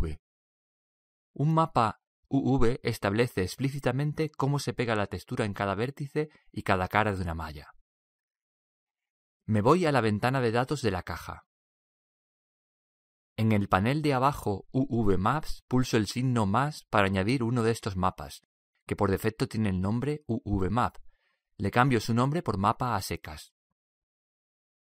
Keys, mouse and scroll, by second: 11.3-15.8 drag, 17.0-19.1 drag, 19.4-24.9 drag.